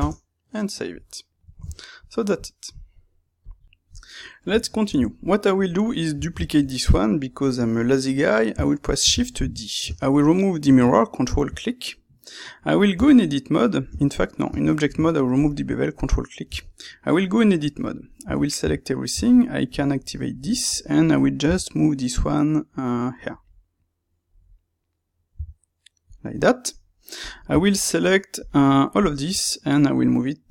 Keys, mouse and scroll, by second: 0.0 KP_Enter, 0.0-1.0 drag, 1.0-3.6 middle drag, 4.1-5.5 middle drag, 5.5 click, 5.8-18.2 middle drag, 9.0 shift+d, 9.4 Escape, 9.8 space, 12.9 Tab, 14.4 space, 16.4 Tab, 18.2 a, 19.1 Tab, 19.4-21.4 ctrl+middle drag, 21.4 g, 23.4 click, 23.4-25.3 middle drag, 25.3 g, 26.2 click, 26.3 middle click, 27.1-28.4 drag, 28.9 shift+click, 29.4-30.5 middle drag, 30.4 g.